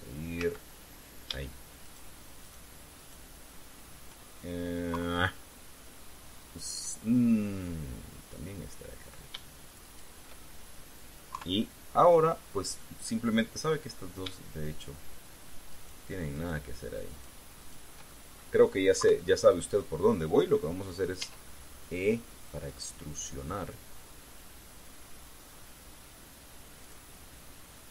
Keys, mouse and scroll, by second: 0.5 shift+z, 1.1 z, 2.5 shift+right click, 3.1 shift+right click, 3.7 shift+right click, 5.7 KP_3, 8.3-10.1 middle drag, 10.6 shift+right click, 12.1 KP_3, 14.1 middle click, 16.5 shift+right click, 17.1 shift+right click, 17.9 shift+right click, 18.3 shift+right click, 18.8 shift+middle click, 19.7 KP_3, 21.9 e, 27.6 click.